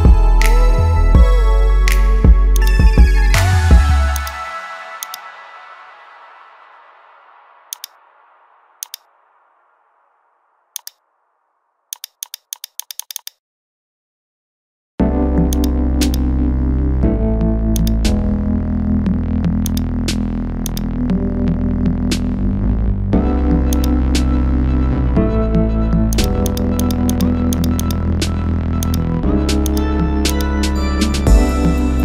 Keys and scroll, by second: 1.5 ctrl++, 6.3 ctrl+z, 13.6 ctrl+Return.